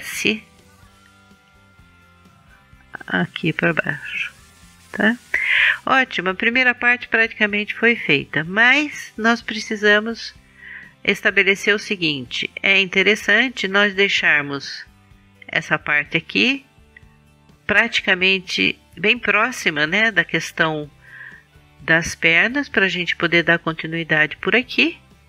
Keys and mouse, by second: 0.3 s, 2.7-4.7 drag, 12.3-14.2 drag, 15.5-17.4 drag.